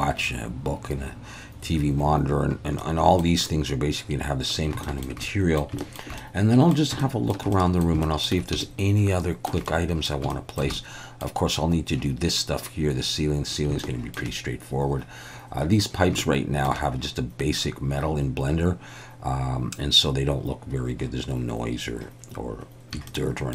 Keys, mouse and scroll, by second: 2.8 middle click, 4.8 shift+middle click, 5.3 middle click, 5.8 shift+middle click, 6.2 middle click, 7.1 shift+middle click, 7.6 middle click, 8.1 shift+middle click, 8.7 shift+middle click, 9.7 middle click, 10.4 shift+middle click, 10.8 middle click, 13.8 shift+middle click, 16.2 shift+middle click, 23.1 shift+middle click.